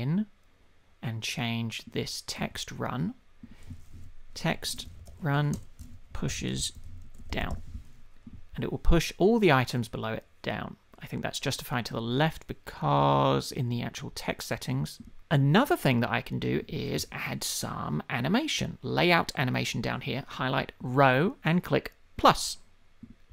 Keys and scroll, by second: 4.2 Right, 4.5 Return, 7.0 Return.